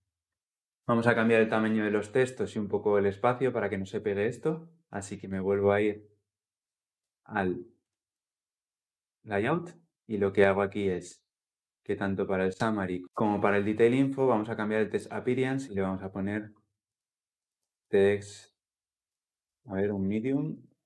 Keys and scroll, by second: 7.8 ctrl+b.